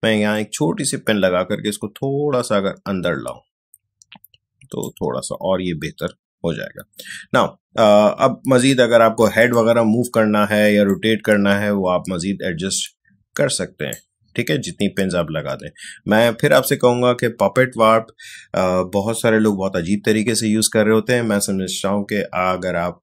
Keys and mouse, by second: 9.4-23.0 drag.